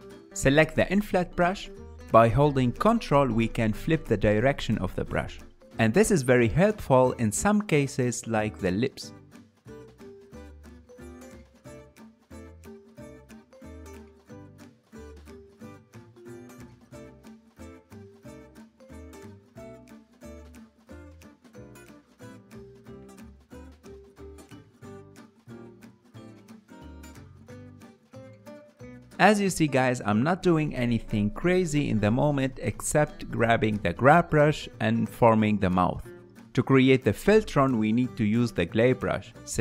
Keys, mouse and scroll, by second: 0.0 shift+click, 0.2 middle click, 1.0 KP_1, 1.7-3.4 ctrl+middle drag, 3.4-12.6 shift+drag, 12.6-15.3 ctrl+middle drag, 15.3-17.1 drag, 17.1 f, 19.5-21.6 ctrl+drag, 21.6-22.7 ctrl+middle drag, 22.7-28.6 ctrl+drag, 28.6-30.7 middle drag, 30.7 f, 30.8 ctrl+middle click, 31.6-35.8 drag, 35.8 ctrl+middle click, 38.1-39.4 drag, 39.4 f.